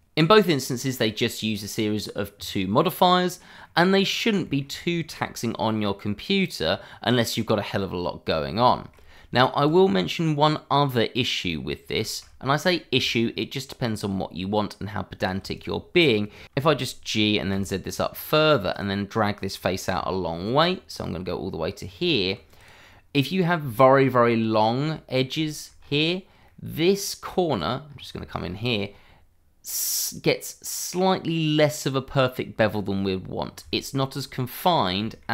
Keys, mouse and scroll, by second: 0.4 click, 3.2-3.6 scroll down 1, 3.6 middle click, 4.0 click, 4.4 shift+middle click, 5.1 middle click, 8.6 shift+middle click, 9.2 middle click, 9.7 click, 11.9 shift+middle click, 12.0 middle click, 12.1 shift+middle click, 13.0 Tab, 15.1 click, 16.4 middle click, 17.5 z, 18.1 click, 18.4 middle click, 18.7 click, 19.9 e, 20.8 click, 21.1-22.0 scroll down 1, 22.0 Tab, 22.5 click, 22.9 middle click, 23.7 shift+middle click, 23.8 middle click, 23.8 shift+middle click, 25.4 shift+middle click, 25.7 scroll up 1, 26.4 middle click, 27.5 click, 27.8-28.1 scroll up 1, 28.1 shift+middle click, 28.4-29.4 scroll up 1, 29.4-30.5 scroll up 1, 32.7-33.4 scroll down 1, 33.7 shift+middle click, 34.7 scroll up 1, 35.0 shift+middle click.